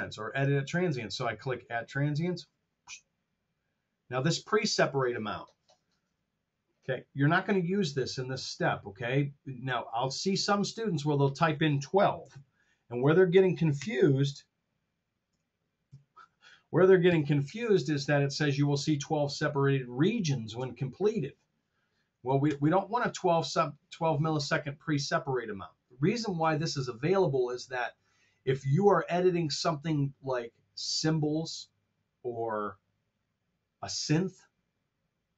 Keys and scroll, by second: 12.2 KP_1, 12.2 KP_0, 13.3 KP_2, 13.7 BackSpace, 14.2 KP_1, 14.2 KP_2, 15.4 BackSpace, 15.8 KP_2, 17.0 super+Tab, 22.3 super+Tab.